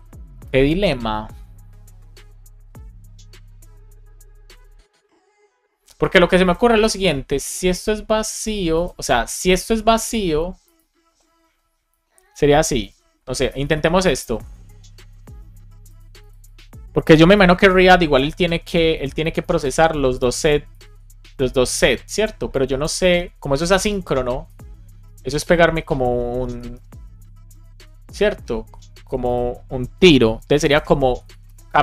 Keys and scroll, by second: 12.7 shift+8, 13.3 BackSpace, 13.6 shift+9, 14.3 super+Right, 17.2 shift+0, 17.5 space, 17.8 shift+[, 18.3 Return, 18.8 Down, 19.1 Right, 20.1 Left, 20.3 shift+super+Right, 20.6 super+x, 20.8 super+Up, 24.9 super+v, 26.1 BackSpace, 27.0 Up, 27.5 super+Right, 30.0-31.3 typing.